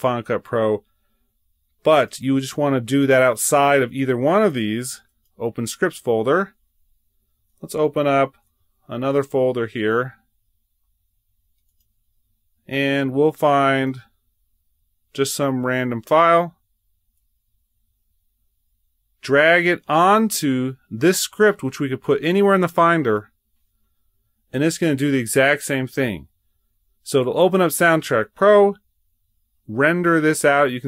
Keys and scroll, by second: 8.3 super+n.